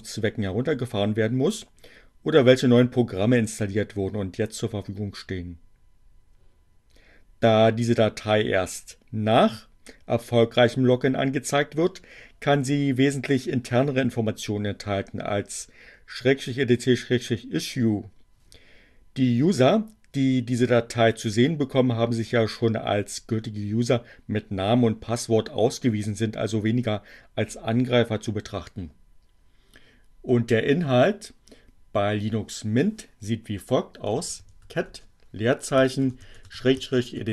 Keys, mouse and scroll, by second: 31.8-32.7 typing, 34.7-37.3 typing.